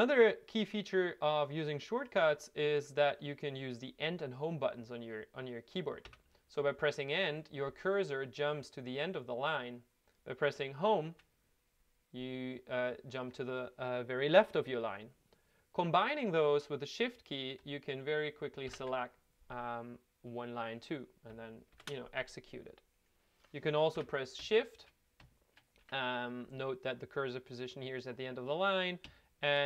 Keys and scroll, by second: 6.0 End, 11.1 Home, 18.6 shift+End, 21.7 ctrl+F9, 23.9 Left, 25.8 Right.